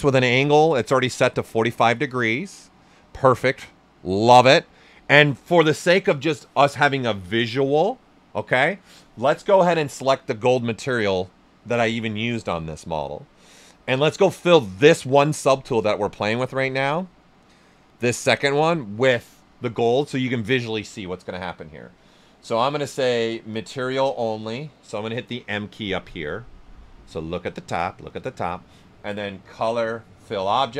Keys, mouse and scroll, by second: 9.2 click, 15.6-17.0 drag, 23.5 click, 29.4 click.